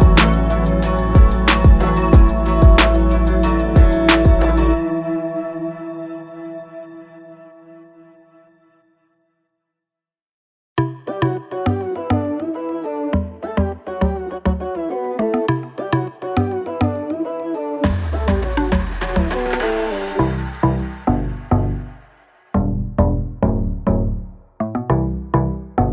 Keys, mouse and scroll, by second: 9.6 z, 10.6 click.